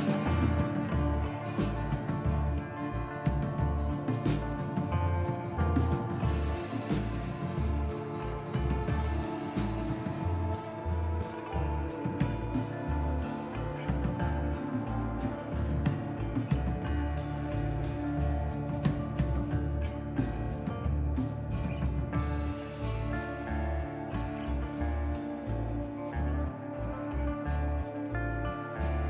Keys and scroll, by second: 4.4 f, 5.6 ctrl+z, 10.7 ctrl+z, 16.0 ctrl+z.